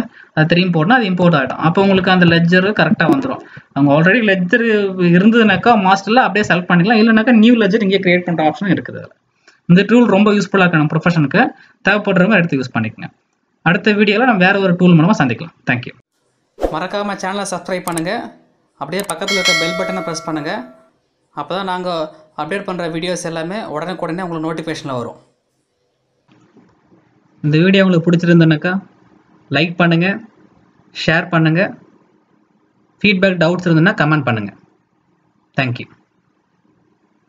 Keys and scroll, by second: 5.5 alt+Tab.